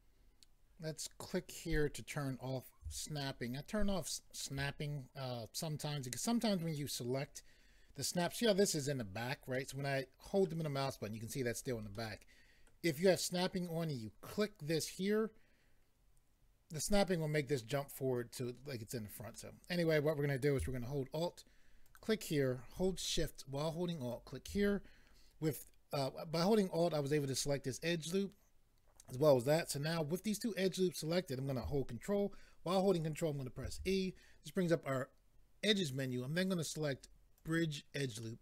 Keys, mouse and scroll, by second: 1.6 click, 3.2 shift+middle click, 9.5 middle click, 12.7 middle click, 19.3 middle click, 21.8 alt+click, 24.1 alt+click, 33.6 ctrl+e, 37.4 click, 38.2 middle click.